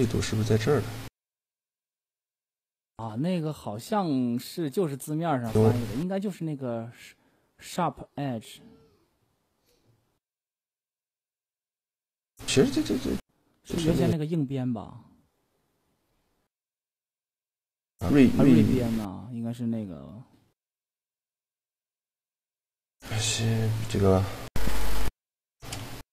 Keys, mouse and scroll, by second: 1.1 middle click, 4.3 n, 7.6-11.1 middle drag, 12.4-14.2 drag, 15.6-17.4 drag, 17.7-18.9 middle drag, 18.9-22.0 right drag, 19.5-20.9 drag, 22.4 c, 24.0 middle click, 24.2 a, 24.6 click, 24.6-25.7 right drag, 25.2 shift+g.